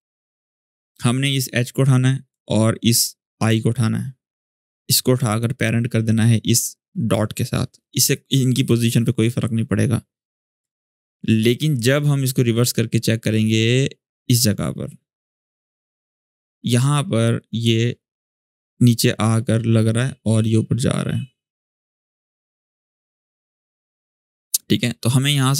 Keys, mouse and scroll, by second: 2.0 click, 5.3-6.9 drag, 10.4 click, 10.6-11.0 alt+scroll up 1, 11.5-24.9 drag.